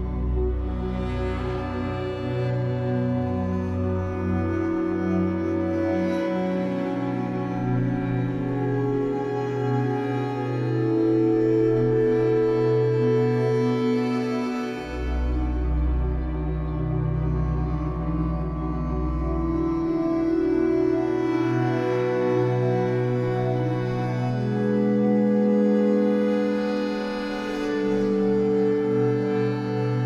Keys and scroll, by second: 0.4 w, 4.8 Escape, 5.1 3, 7.8 w, 13.2 Escape, 16.3 w, 19.9 Escape, 24.6 ctrl+s, 26.4 F8, 28.7 a.